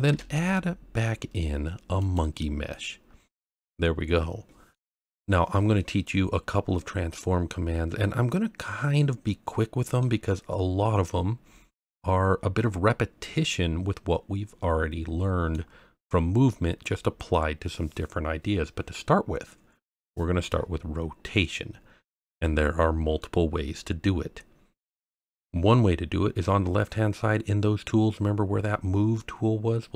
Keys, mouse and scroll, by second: 0.3 shift+a, 2.9-3.7 scroll up 5, 3.7-4.7 middle drag, 8.0-10.0 middle drag, 11.8-15.5 middle drag, 21.8-22.5 scroll down 2, 22.5-22.8 scroll up 1.